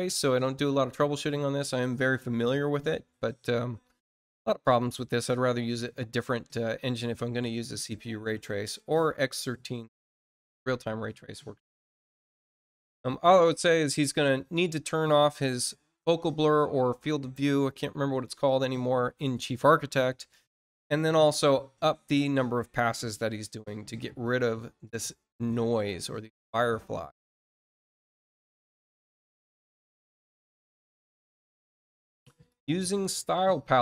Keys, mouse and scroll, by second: 27.6 click, 29.9 click, 32.4 click.